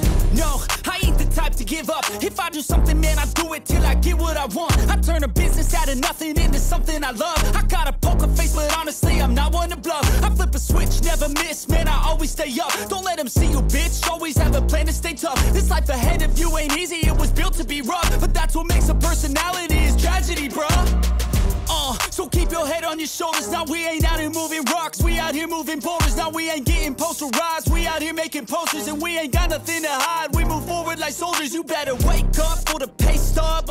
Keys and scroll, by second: 0.8 ctrl+=, 1.4 ctrl+=, 1.5 ctrl+z, 1.7 ctrl+=, 3.0 space, 3.7 ctrl+z, 4.7 space, 7.4 space, 7.7 space, 8.0 ctrl+z, 9.7 ctrl+z, 11.1 ctrl+=, 11.4 ctrl+=, 11.7 ctrl+z, 12.1 ctrl+z, 12.4 ctrl+z, 12.9 ctrl+=, 13.8 ctrl+-, 15.5 space, 27.5 ctrl+-, 27.6 ], 29.5 ctrl+z, 30.2-32.7 typing, 31.7 ctrl+=, 31.9 ctrl+-, 32.6 ctrl+-, 32.9 ctrl+z.